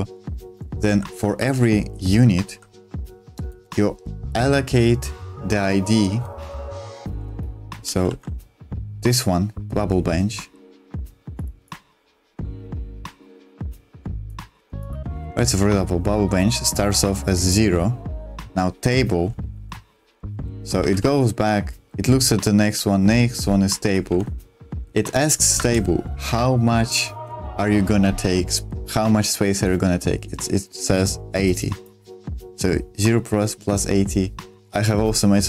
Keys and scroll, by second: 0.0-3.5 typing, 6.8 super+2, 7.2 space, 8.0 ctrl+z, 19.5 super+1, 20.0-21.8 typing, 24.3 j, 24.9 j, 25.0 j, 25.6 shift+v, 27.1 super+2.